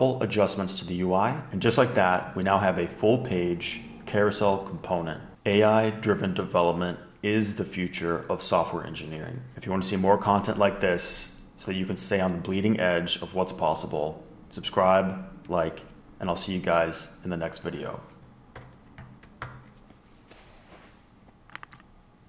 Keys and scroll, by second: 18.3 super+h, 18.5 super+h, 18.9 super+h.